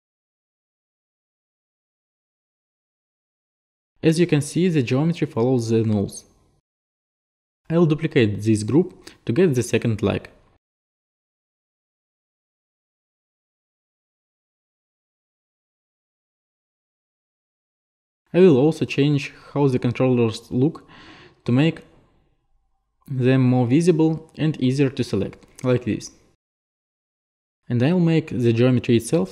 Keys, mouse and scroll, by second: 1.9 click, 4.9 click, 7.6 ctrl+z, 8.6 click, 8.9 click, 10.8 ctrl+click, 12.4 Return, 12.4 BackSpace, 14.1 click, 14.8 shift+click, 15.6 ctrl+click, 15.8 ctrl+click, 16.0 ctrl+click, 18.2 click, 19.2 click, 20.0 click, 20.6 right click, 20.9 right click, 21.6 right click, 22.4 right click, 23.2 right click, 24.6 click, 25.7 click, 26.1 click, 26.5 5, 26.6-27.2 Return, 27.2 middle click, 27.7 middle click, 28.1 click, 28.6 click.